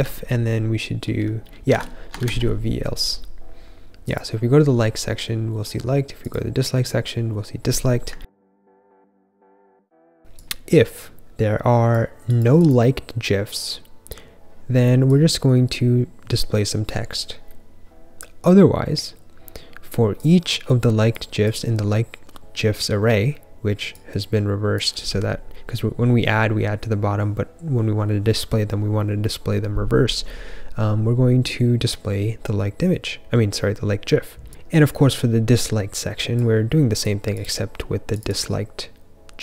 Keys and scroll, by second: 0.0-1.6 typing, 1.6 super+s.